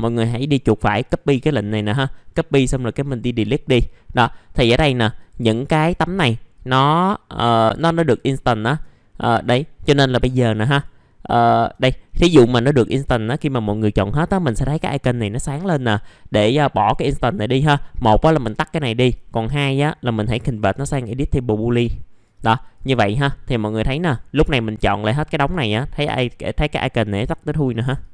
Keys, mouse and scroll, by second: 0.9 click, 2.1 right click, 3.0 click, 4.1 middle click, 5.1 ctrl+click, 5.7 ctrl+click, 6.5 ctrl+click, 7.4 ctrl+click, 8.3 ctrl+click, 9.2 right click, 10.7 click, 11.3 alt+middle click, 12.0-16.3 scroll down 1, 19.1-20.2 right drag, 20.5 click, 23.9 ctrl+click, 24.5 click.